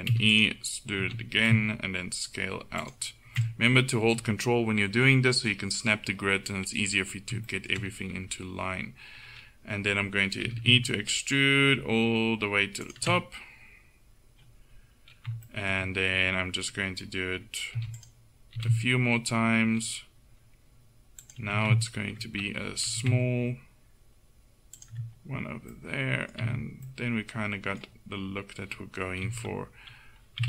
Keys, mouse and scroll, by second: 0.2 e, 1.1 s, 6.1-7.2 middle drag, 10.5 e, 13.3-14.0 scroll up 1, 17.8 e, 18.6 s, 21.6 ctrl+e, 22.9 e, 26.5 Tab, 29.3 KP_1.